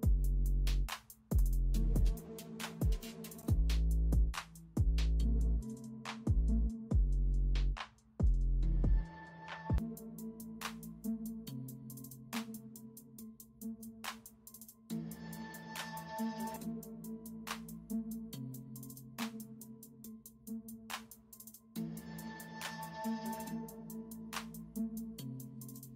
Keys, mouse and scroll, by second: 0.9 ctrl+d, 1.9 d, 2.2 ctrl+alt+z, 2.5 r, 2.9 ctrl+space, 4.2 0, 7.4 ctrl+j, 16.2 alt+shift+click, 17.4 ctrl+t, 17.7 alt+shift+click, 18.8 ctrl+t, 19.1 alt+shift+click, 19.9 alt+shift+click, 20.8 ctrl+t, 21.0 alt+shift+click, 22.9 shift+click, 23.1 ctrl+t, 24.1 alt+scroll up 1, 24.4 alt+scroll down 1, 25.2 alt+shift+click.